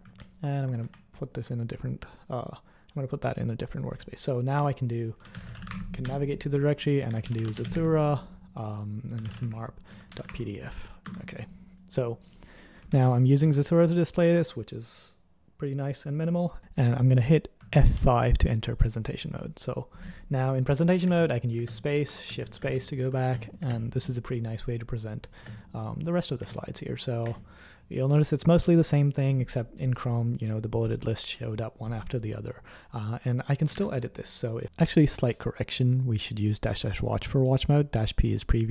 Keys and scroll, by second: 0.1 ctrl+super+h, 0.8 super+#, 4.9-10.7 typing, 11.0 Return, 13.1 super+l, 13.4 super+l, 18.0 F5, 19.7 F5, 22.2 shift+space, 22.5 shift+space, 23.2 _, 23.5 space, 33.8 super+1.